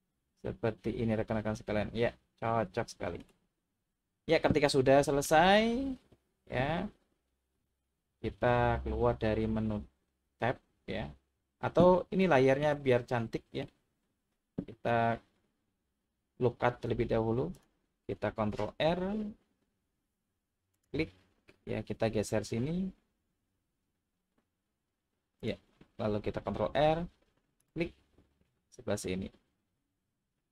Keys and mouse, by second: 4.6-5.2 middle drag, 12.3 shift+middle click, 12.9 middle click, 18.8 ctrl+r, 25.4 click, 26.6 ctrl+r.